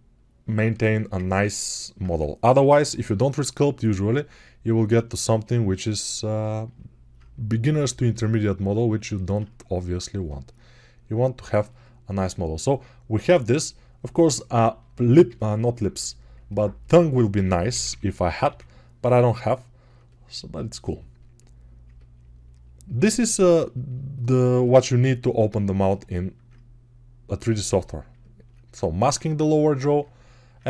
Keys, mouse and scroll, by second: 1.9 1, 2.4 [, 2.9 [, 3.5 [, 17.2-18.3 typing.